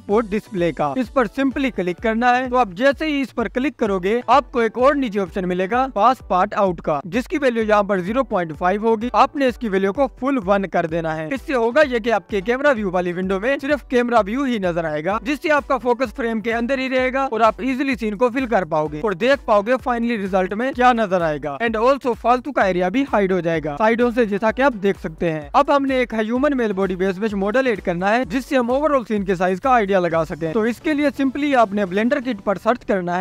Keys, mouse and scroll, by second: 4.8-5.3 scroll down 1, 15.4 click, 16.3 scroll up 2, 16.6 scroll down 1, 16.8 scroll up 1, 17.0 scroll down 1, 17.2 scroll up 1, 17.3-18.8 scroll down 2, 18.8-19.1 scroll up 1, 19.1-20.0 scroll down 1, 20.0-20.4 scroll up 1, 20.4-22.5 scroll down 1, 22.5 scroll down 1, 22.6 click, 24.2-24.9 scroll up 2, 24.9-27.9 scroll down 1, 27.9 scroll up 1, 28.1-28.8 scroll down 2, 32.0-33.2 drag.